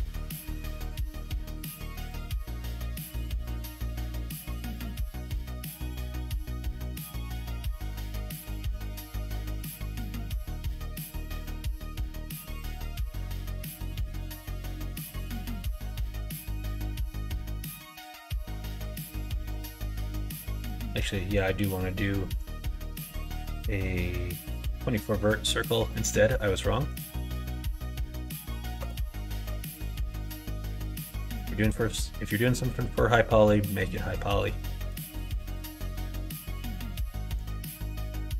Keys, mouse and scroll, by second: 3.4 e, 9.1 3, 9.8 middle click, 10.9-12.5 middle drag, 13.4 right click, 20.1 middle click, 20.8 Tab, 21.5 x, 23.2 shift+a, 25.8 middle click, 26.8-30.5 drag, 31.0 middle click, 31.6 middle click, 32.3 middle click, 34.8 Tab, 35.5 s, 37.4 g.